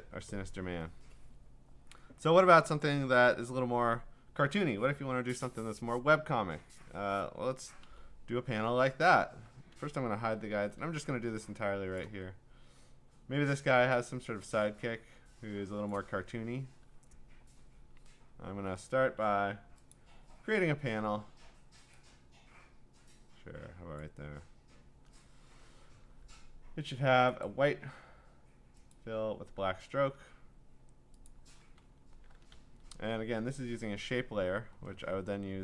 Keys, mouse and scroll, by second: 0.6 click, 7.8 m, 9.1 scroll, 10.2 ctrl+h, 12.0 click, 15.9 click, 19.2 ctrl+d, 19.9 click, 24.0 click, 27.4 click, 28.9 click, 31.3 click, 31.8-34.0 scroll, 34.0-34.8 scroll, 34.8 scroll down 8.